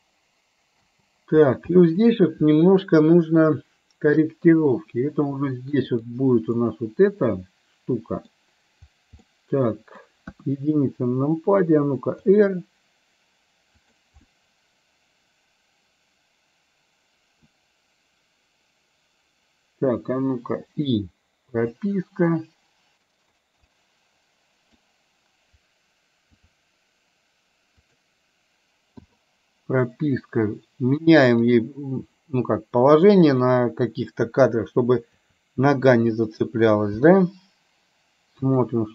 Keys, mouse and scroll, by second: 0.9 space, 1.9 middle click, 6.7-8.4 middle drag, 9.3 middle click, 10.3 KP_1, 12.3 r, 14.3-17.5 middle drag, 20.7 i, 21.9-23.4 drag, 23.7-24.8 middle drag, 26.3 r, 29.1 i, 31.6 click, 33.3 click, 35.2 r, 37.1 i, 38.5 click.